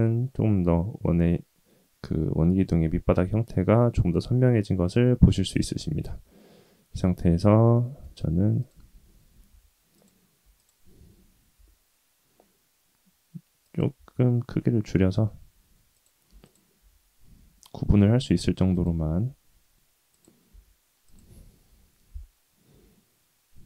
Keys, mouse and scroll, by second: 5.5-5.8 middle drag, 6.0 Tab, 7.7 middle click, 8.6 click, 9.6 2, 9.9 click, 10.5 alt+click, 11.5 s, 13.9 Tab, 14.5 middle click, 15.2 Tab, 15.9 click, 16.4 alt+click, 17.2 g, 19.0 s, 20.5 s, 21.6 KP_3, 22.7 g.